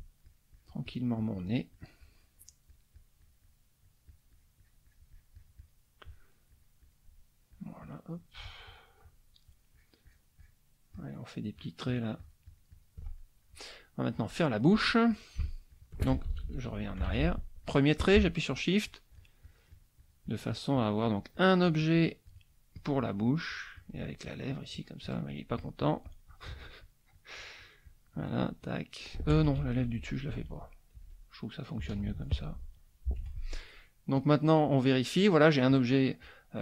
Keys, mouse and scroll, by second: 0.2-2.3 shift+drag, 2.4-3.7 shift+drag, 3.8-5.9 shift+drag, 6.5-8.0 shift+drag, 8.1 shift+click, 9.5 shift+click, 10.9 shift+click, 11.5-13.0 shift+drag, 13.2 shift+middle click, 15.1 click, 15.4 shift+click, 16.3 ctrl+shift+z, 17.1 ctrl+z, 17.6 ctrl+click, 18.5 shift+click, 22.7-26.5 shift+drag, 26.8 shift+click, 29.6 ctrl+shift+z, 31.8 ctrl+z, 33.7 F1, 34.2-35.4 drag, 35.7 click.